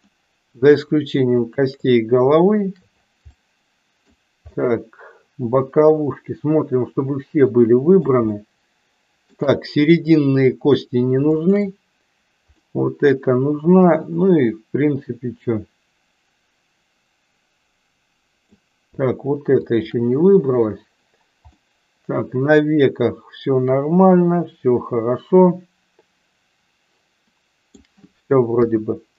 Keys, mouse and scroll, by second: 0.1 middle click, 1.4 shift+click, 3.4 middle click, 4.5-8.1 middle drag, 8.3-9.3 shift+middle drag, 11.4 shift+click, 12.5-18.6 middle drag, 19.7 shift+click, 21.6-27.9 middle drag, 28.6 KP_1.